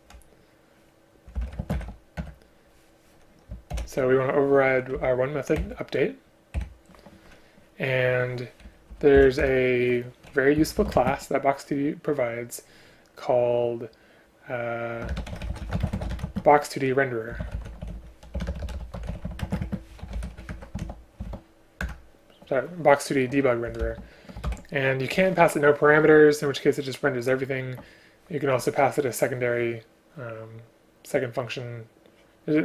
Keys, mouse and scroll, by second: 1.6 shift+space, 2.2 Return, 3.8 ctrl+o, 5.0 Down, 5.6 Return, 6.6 Delete, 8.7 Up, 9.2 End, 9.4 Return, 11.0 space, 15.1 BackSpace, 15.8 space, 16.2 space, 18.3 BackSpace, 18.5 BackSpace, 19.4 space, 19.6 space, 21.8 Return, 24.5 ctrl+p.